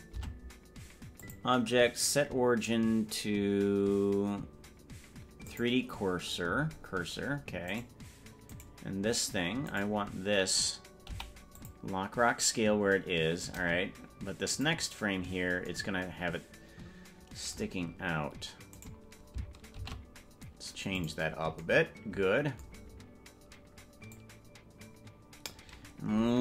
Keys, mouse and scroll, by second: 0.4 Tab, 1.2-5.7 drag, 8.0 right click, 8.8 right click, 10.0 right click, 11.2 i, 14.5 click, 18.8 right click, 19.8 shift+d, 24.3-25.7 drag.